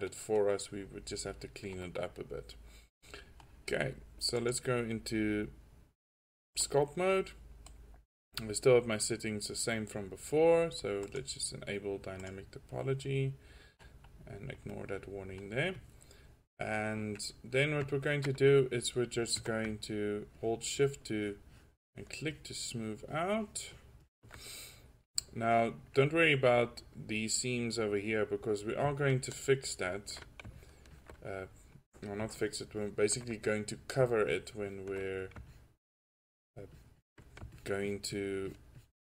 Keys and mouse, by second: 0.0 click, 1.3-1.8 drag, 2.1 middle click, 2.3 middle click, 3.1 middle drag, 10.9 middle click, 13.8-14.3 middle drag, 16.8 drag, 20.0-20.5 drag, 24.8 drag, 27.5-28.3 middle drag, 29.2-29.6 drag, 31.6 drag.